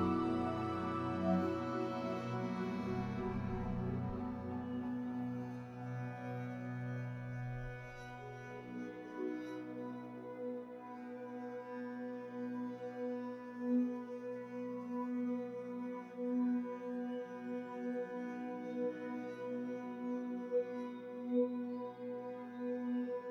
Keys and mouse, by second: 0.4 click, 1.5 shift+click, 2.1 middle click, 2.5 click, 3.6 alt+z, 3.9 middle click, 4.4 Tab, 4.7 Tab, 5.3 middle click, 6.3 middle click, 7.0 click, 7.6 alt+z, 8.2 ctrl+z, 8.3 ctrl+z, 8.4 ctrl+z, 8.6 ctrl+z, 9.1 ctrl+z, 9.2 middle click, 12.1 click, 12.5 alt+shift+click, 12.8 middle click, 13.3 alt+shift+click, 13.8 s, 17.8 Tab, 18.1-18.5 middle drag, 18.7-19.4 middle drag, 19.5 click, 19.7 s, 20.1 click, 20.4 s, 21.8-22.9 middle drag, 23.1 ctrl+s.